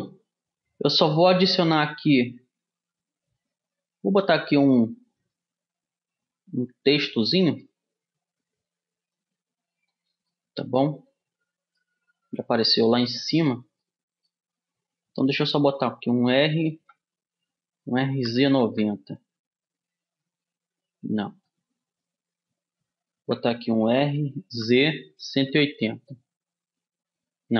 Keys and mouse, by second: 2.2 shift+a, 7.7-9.6 middle drag, 9.8 click, 10.9-12.3 middle drag, 13.0-14.4 drag, 14.4 middle click, 16.3 r.